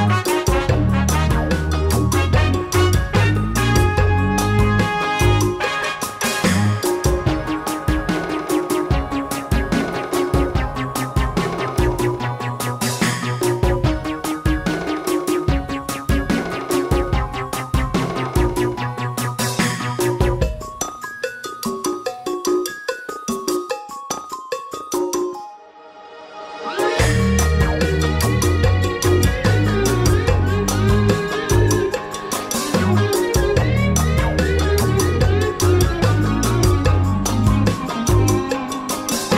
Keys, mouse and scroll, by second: 0.7-3.1 drag, 4.3-6.4 drag, 10.9 click, 14.1-15.5 drag, 15.6-17.4 drag, 17.5 click, 18.2-19.3 middle drag, 19.7 click, 20.3 click, 21.2 middle click, 22.5-23.9 middle drag, 25.2-26.0 drag, 28.1 click, 29.6 KP_Divide, 31.4-32.6 drag, 35.9 a.